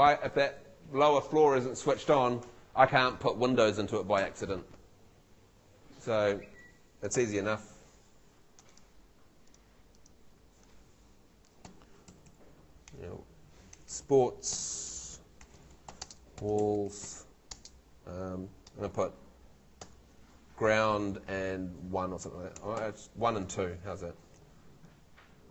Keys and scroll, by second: 7.4 super+l, 11.7 w, 12.1 a, 12.9 BackSpace, 14.2-17.6 typing, 19.8 shift+g, 22.6 BackSpace, 22.7 |.